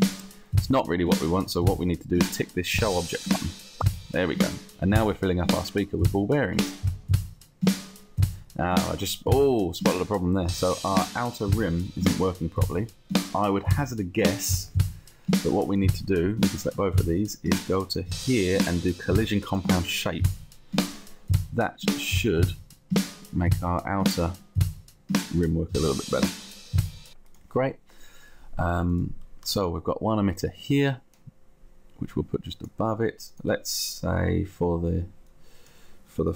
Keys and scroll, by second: 29.7 space.